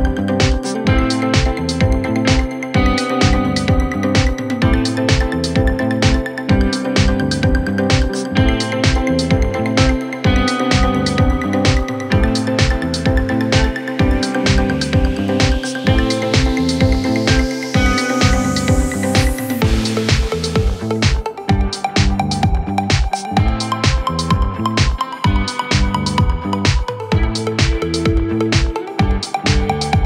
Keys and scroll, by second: 6.2 F3, 6.6 Escape, 7.4 Delete, 8.3 shift+F2, 8.6 Escape.